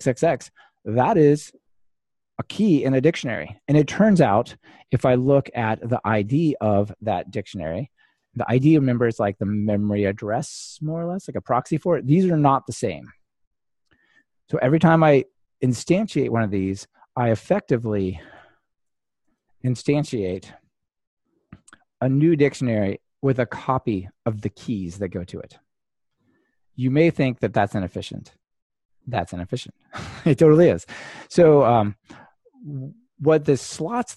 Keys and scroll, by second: 10.7 ctrl+r, 18.2 Delete, 20.3 ctrl+r.